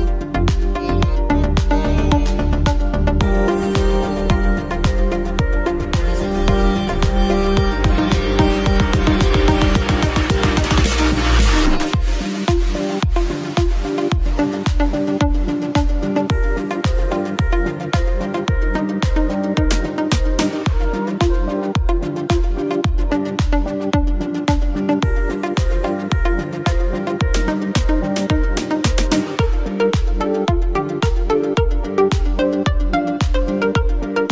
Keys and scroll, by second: 0.0-1.6 typing, 3.6 ctrl+t, 10.8 shift+space, 20.1 ctrl+t, 25.6 Left, 31.8 shift+space, 32.7 shift+space.